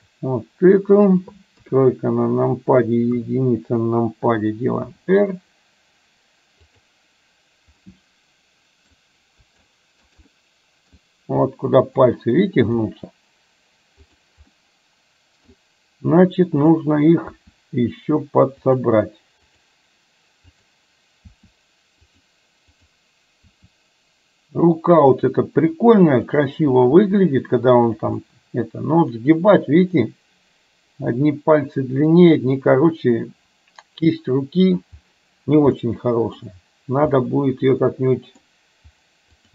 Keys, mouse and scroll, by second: 1.7 KP_3, 3.2 KP_1, 5.1 r, 7.9-9.1 middle drag, 9.8 shift+middle click, 10.3 middle click, 11.6 middle click, 12.9 r, 14.6-15.7 middle drag, 16.7 click, 17.3 r, 19.6 click, 20.7 click, 21.4 r, 22.8 click, 23.6 r, 26.3 click, 27.1 r, 28.3-34.8 middle drag, 35.9-36.4 middle drag, 37.2-38.6 middle drag, 39.4 click.